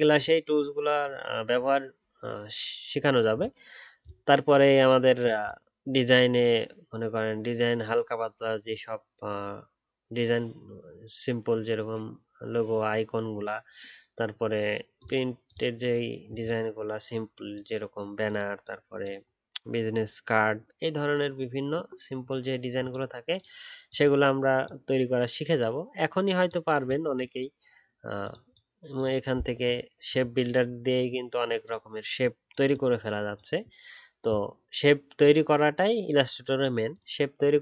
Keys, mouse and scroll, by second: 29.8-32.9 alt+scroll up 1.